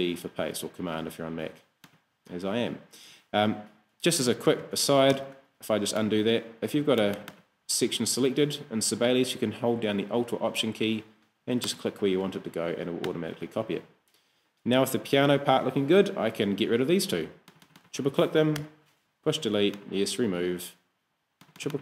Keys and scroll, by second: 4.7 super+z, 18.6 BackSpace.